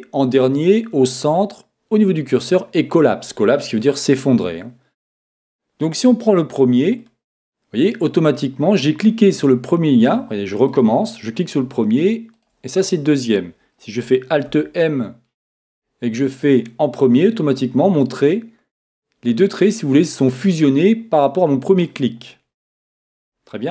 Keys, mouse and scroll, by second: 10.7-14.1 right drag, 14.1 right click, 14.4 alt+m.